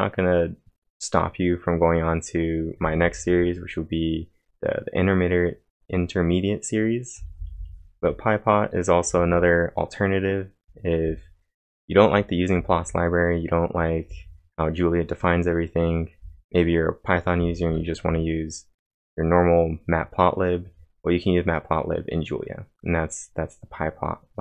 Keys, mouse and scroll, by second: 2.8 typing, 7.2 typing, 9.0 j, 10.8-16.7 typing.